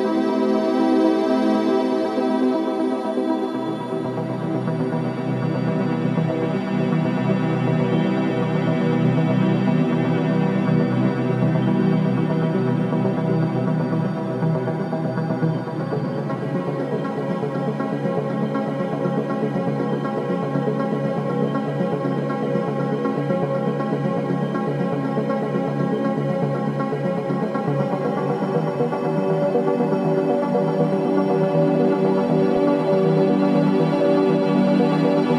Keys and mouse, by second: 4.6 ctrl+s, 5.0 middle click, 5.6 Tab, 12.3 Tab, 13.0 Tab, 13.8-14.4 middle drag, 16.4 middle click, 17.3 Tab, 17.8 middle click, 18.6 ctrl+s, 19.3 shift+a, 20.9 click, 22.8-25.2 middle drag, 25.4 alt+z, 26.0-28.1 middle drag, 28.4 Tab, 29.1 Tab, 29.7-33.6 middle drag, 34.2 Tab.